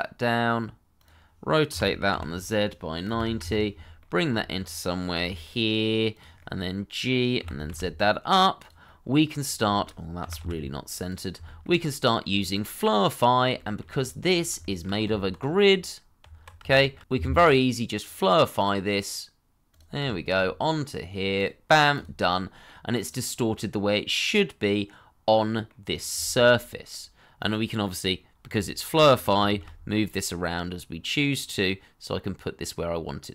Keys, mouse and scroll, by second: 1.7 r, 2.1 z, 3.0 9, 3.4 Return, 4.0 shift+middle click, 4.3-5.1 shift+scroll up 1, 5.1 g, 6.4 middle click, 7.4 g, 7.7 z, 8.8 middle click, 9.3 scroll up 1, 9.6 shift+middle click, 10.2 g, 10.4 y, 11.4 shift+middle click, 12.0 middle click, 12.3 shift+middle click, 14.3 scroll down 1, 15.0 click, 15.4 Tab, 15.6 scroll up 1, 16.2 Tab, 16.7 shift+middle click, 17.0 double click, 20.1 shift+middle click, 22.2 middle click, 25.8 scroll down 1, 26.2 shift+middle click, 26.5 middle click, 28.4 g, 29.5 shift+z.